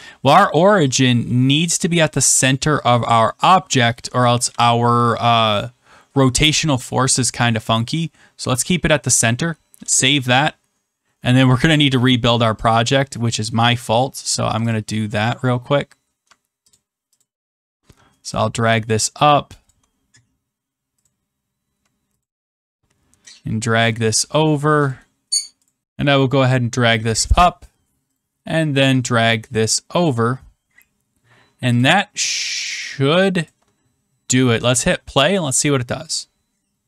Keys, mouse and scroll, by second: 0.3 click, 4.1 click, 4.4 ctrl+s, 9.9 click, 10.7-11.2 scroll, 12.6 click, 12.6 scroll, 14.7 ctrl+click, 15.8 scroll, 16.7 scroll, 16.8 ctrl+click, 17.2 ctrl+click, 20.7 shift+click, 21.0 click, 22.2 ctrl+click, 24.8 click, 25.6 click, 27.0 shift+click, 29.9 click, 31.7 shift+click, 33.4 shift+click.